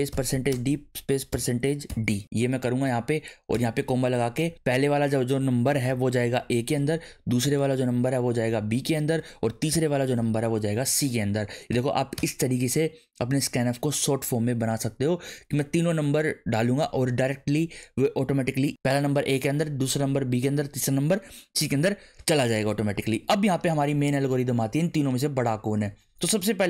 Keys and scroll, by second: 0.0-1.9 typing, 2.2 Right, 2.8 Left, 3.7 ,, 5.6-7.4 typing, 8.5 b, 8.7 ,, 9.7 shift+7, 10.1 c, 10.9 Right, 11.9 ;, 12.1 Return, 23.0 Return.